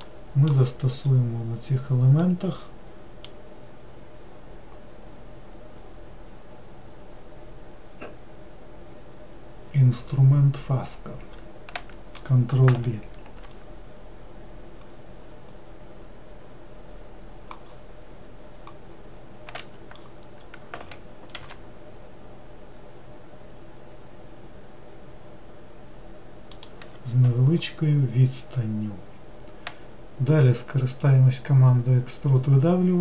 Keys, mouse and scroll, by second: 0.0-1.0 middle drag, 1.0-2.2 scroll up 2, 2.2-5.4 middle drag, 13.2 ctrl+b, 20.0-20.4 scroll up 2, 21.3 ctrl+b, 28.1 scroll down 1.